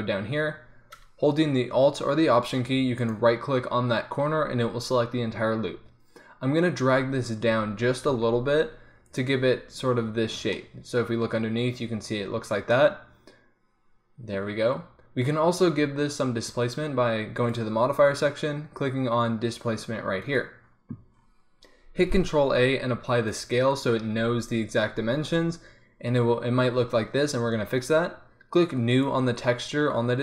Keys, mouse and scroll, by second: 5.8-8.1 middle drag, 7.5 g, 9.4 Tab, 10.8 click, 12.7 middle click, 16.5 middle click, 17.4-20.4 drag, 21.3 click, 21.8 middle click, 22.0 ctrl+a, 29.0-30.2 drag.